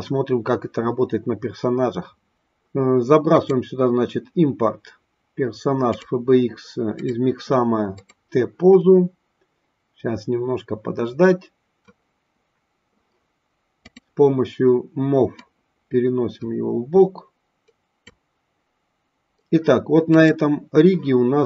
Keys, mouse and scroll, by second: 3.4-6.1 drag, 13.9 click, 15.9-18.9 drag, 20.0 click.